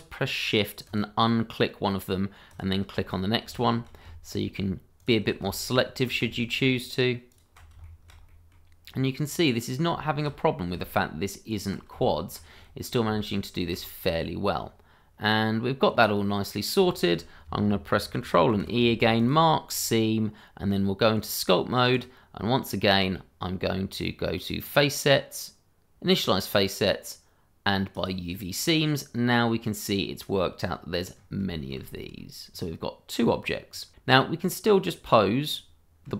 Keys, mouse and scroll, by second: 0.8 shift+click, 2.5 click, 3.1-3.5 scroll down 1, 3.5 shift+middle click, 5.0 ctrl+click, 5.6 shift+middle click, 7.3 click, 7.8 shift+middle click, 7.9 middle click, 8.0 shift+middle click, 8.5 middle click, 8.9-9.3 scroll down 1, 9.3 middle click, 10.0 shift+middle click, 10.1 middle click, 10.2 shift+middle click, 10.3-10.9 scroll up 1, 11.5 click, 12.0 shift+middle click, 12.1 middle click, 12.2 shift+middle click, 12.6 middle click, 13.2 shift+middle click, 14.1-14.6 scroll up 1, 15.3 scroll down 1, 16.2 middle click, 17.1 shift+middle click, 18.5 ctrl+e, 19.2 click, 19.7-20.1 scroll down 1, 21.1 click, 22.9 scroll down 1, 24.6 click, 27.9 click, 28.8 middle click, 30.6-31.4 scroll up 2, 31.4 middle click, 32.4-33.2 scroll down 1, 33.5 middle click, 34.9 click.